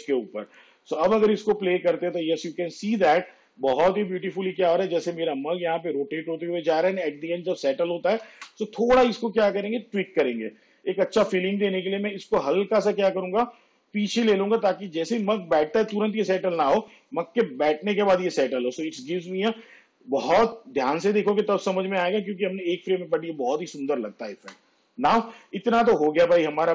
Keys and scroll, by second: 1.1 space, 8.5 space, 16.0 space, 24.5 space.